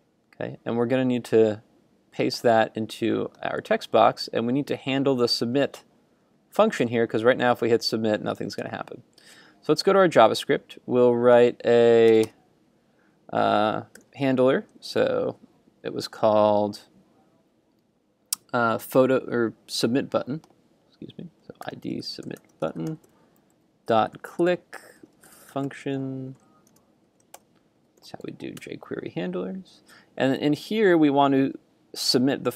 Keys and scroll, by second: 3.6 super+v, 8.6 super+Tab.